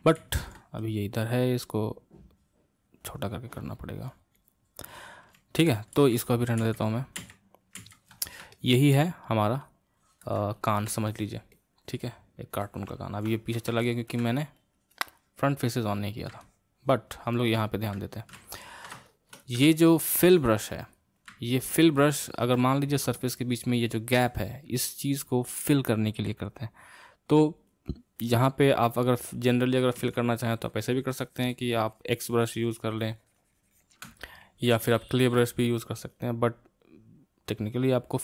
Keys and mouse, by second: 0.4 ctrl+z, 1.8-5.8 drag, 5.8 ctrl+z, 6.2 ctrl+z, 6.8 ctrl+z, 7.4 ctrl+z, 8.0 ctrl+z, 8.5-14.6 middle drag, 14.6-16.4 drag, 16.4-20.9 middle drag, 20.9 click, 21.7-24.7 middle drag, 30.0 c, 30.5-33.5 drag, 34.9 ctrl+z, 37.7-38.2 drag.